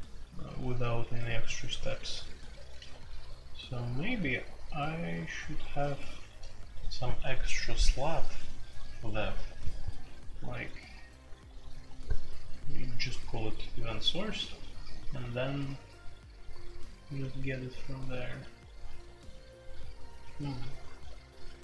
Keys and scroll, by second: 2.5-3.1 typing, 4.2 k, 5.9 h, 6.1 h, 6.3 h, 6.4 h, 9.4 i, 10.0 j, 10.0 k, 13.9-16.1 typing, 21.4-21.6 typing.